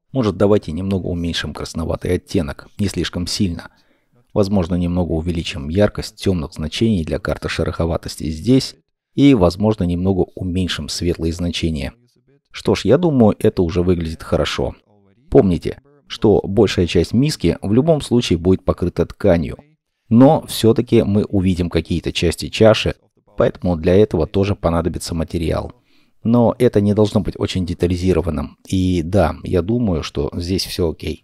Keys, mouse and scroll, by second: 0.1 scroll up 1, 4.2 scroll down 1, 4.6 middle click, 12.7-13.1 scroll down 1, 13.1 middle click, 20.3 middle click, 25.6 middle click.